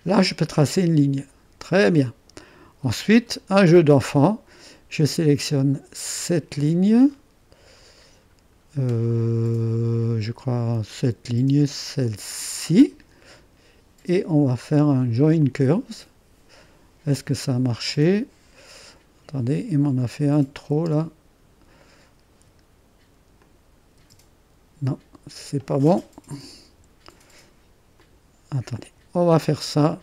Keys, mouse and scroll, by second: 0.7-3.2 drag, 6.2-7.3 drag, 10.7 scroll up 2, 11.0-13.7 drag, 15.4-16.5 drag, 17.2-18.3 drag, 19.0-20.2 drag, 20.5-23.4 drag, 20.7 space, 23.6-24.6 drag, 24.0 space, 26.6 Delete, 27.9-29.1 drag.